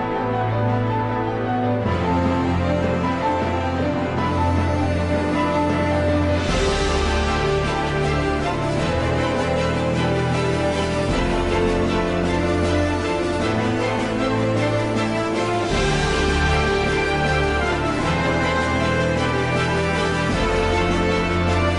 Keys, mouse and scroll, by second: 0.2-2.5 alt+drag, 2.8 alt+click, 4.5 alt+click, 6.5 right click, 9.6 Delete, 11.1-12.3 right drag, 14.3 shift+right click, 16.2 shift+click.